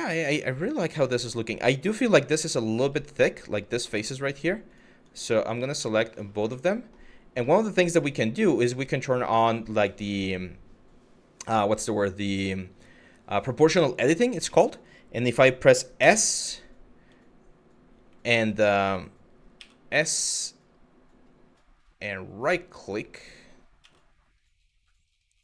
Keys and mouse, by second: 0.1-0.5 middle drag, 1.7 click, 2.0 shift+middle drag, 2.5 Tab, 2.9 middle click, 3.5 middle click, 6.2 middle click, 7.1 middle click, 7.6 middle click, 9.1 click, 14.1 middle click, 15.6 s, 17.9 ctrl+z, 19.2 s, 23.4 s.